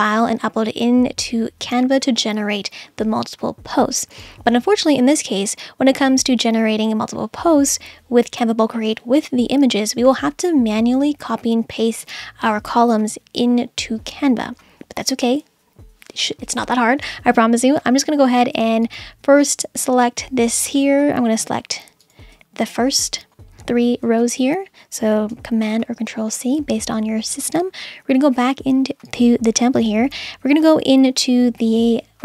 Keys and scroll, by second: 25.3 super+c.